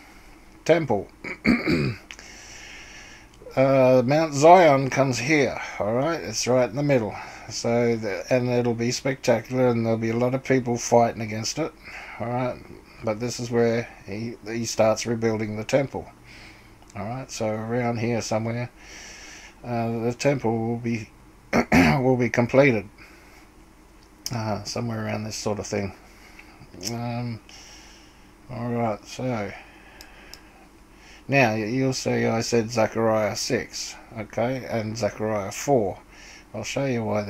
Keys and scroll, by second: 0.0-0.4 typing.